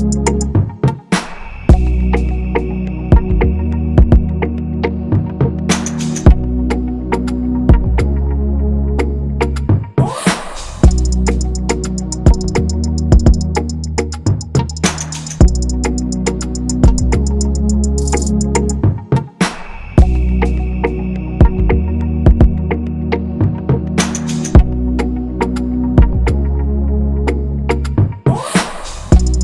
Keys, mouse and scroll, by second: 0.5 shift+click, 1.3 scroll, 1.8 alt+click, 2.2 scroll, 2.5 ctrl+shift+], 2.8 scroll, 4.9 shift+click, 6.7 ctrl+=, 6.8 ctrl+=, 6.9 ctrl+=, 7.5-7.9 scroll up 1, 22.8 typing, 26.7 typing.